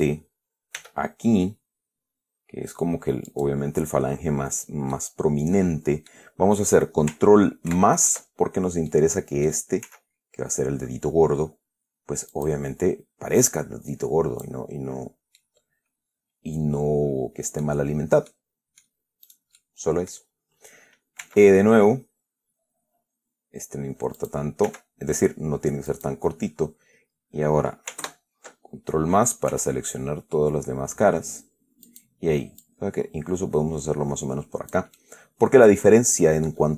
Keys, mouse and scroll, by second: 1.1 e, 3.6 click, 5.2-6.6 middle drag, 8.0 ctrl+KP_Add, 9.2 middle click, 10.1 s, 12.6 click, 13.8-14.9 drag, 15.1-15.5 scroll up 2, 15.7-18.1 middle drag, 18.6 middle click, 19.6 right click, 19.9 middle click, 21.5 e, 24.5 click, 24.9 e, 26.2 click, 28.3 ctrl+KP_Add, 29.8 s, 32.2 click, 32.9-35.2 drag, 35.3-36.7 middle drag.